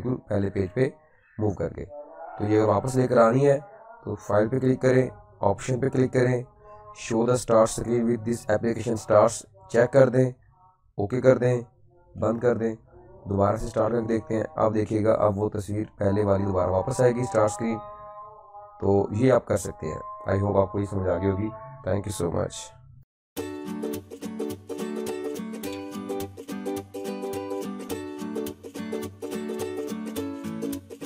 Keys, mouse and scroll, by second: 0.9 typing, 3.6 scroll up 1, 3.6 click, 9.6 click, 12.6 typing, 13.7 typing, 14.9 click, 14.9 typing, 18.2 click, 19.2-19.9 typing.